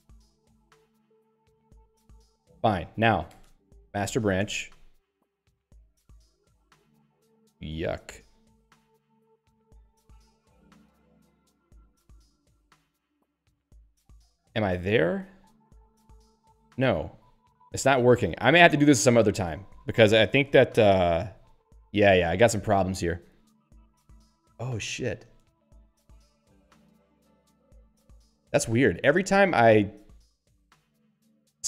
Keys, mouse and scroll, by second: 0.5 z, 2.0 Return, 3.1-4.5 typing, 18.9 $, 21.0 click, 21.2 q, 22.2 click, 22.3 click, 30.9 click, 31.0 click, 31.4-31.6 typing.